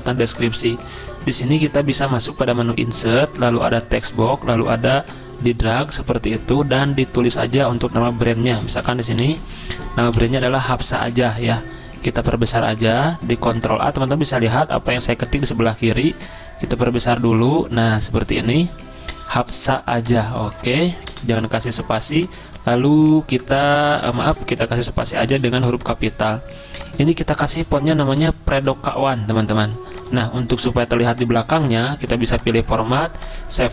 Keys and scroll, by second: 8.4-11.0 typing, 11.3 ctrl+a, 21.1 BackSpace, 24.2 ctrl+z, 25.5 typing, 27.1-28.2 typing.